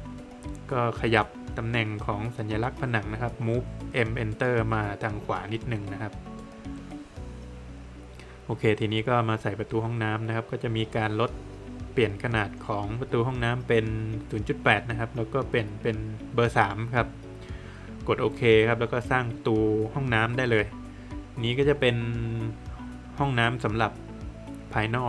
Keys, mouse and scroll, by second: 2.6 space, 3.2 click, 5.0 middle click, 6.4 middle click, 8.2 middle click, 8.3 click, 11.1 click, 13.6 click, 14.7 click, 17.9 click, 20.1 click.